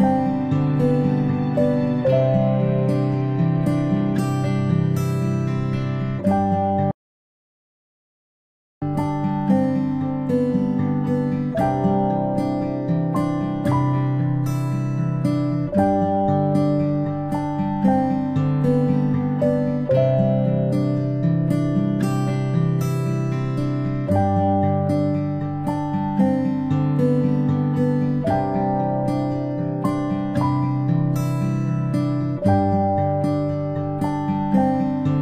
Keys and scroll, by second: 2.5-2.9 space, 13.2 ctrl+space, 13.4 ctrl+space, 14.8 ctrl+space, 30.8-31.1 space.